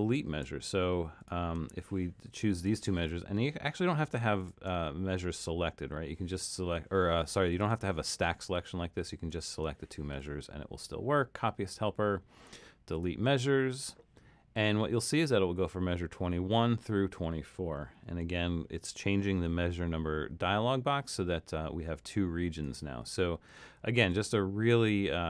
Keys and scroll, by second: 24.0 super+z.